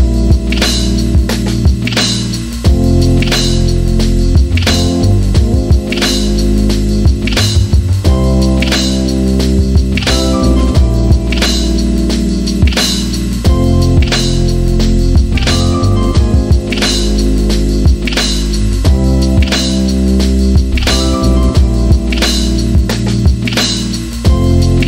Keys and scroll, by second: 0.1 Return, 2.5-4.4 typing, 7.5-9.2 typing, 11.3-13.4 typing, 15.8-17.8 typing, 22.2 e.